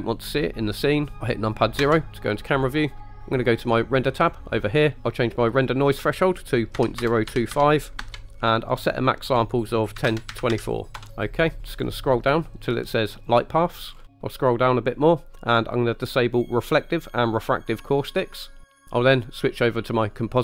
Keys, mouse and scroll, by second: 1.9 KP_0, 4.2 click, 5.9-11.0 drag, 11.7-13.4 scroll down 3, 13.4 click, 14.0 scroll down 2, 16.7 click, 17.3 click, 18.4-18.8 scroll up 5.